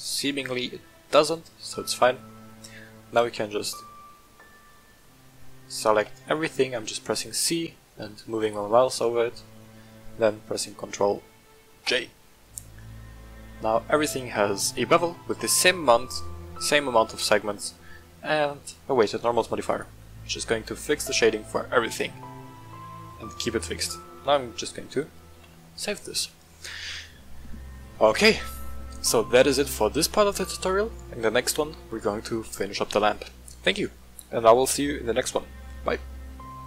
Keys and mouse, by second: 0.5-1.3 middle drag, 2.3 middle drag, 5.0 shift+middle drag, 5.9 c, 8.4 click, 9.1-9.5 shift+middle drag, 12.0 ctrl+j, 13.7-14.1 middle drag, 19.7 right click, 20.0-20.4 middle drag, 20.8-21.1 shift+middle drag, 21.7-22.7 middle drag, 25.3 ctrl+s, 29.1-29.5 middle drag, 30.1-31.1 middle drag.